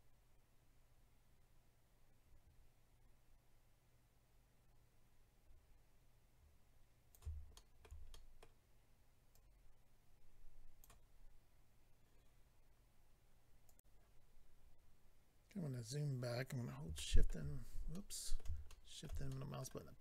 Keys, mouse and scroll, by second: 7.5 shift+middle click, 8.1 middle click, 9.3 click, 13.7 click, 13.8 click, 15.3-16.5 scroll down 4, 17.0 shift+middle click, 17.9 middle click, 18.6 shift+middle click, 19.0 middle click, 19.3 middle click.